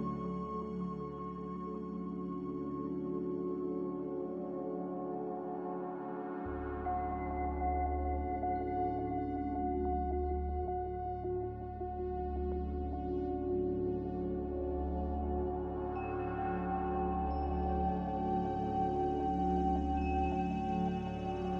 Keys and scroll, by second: 2.2 BackSpace, 3.4-4.2 typing.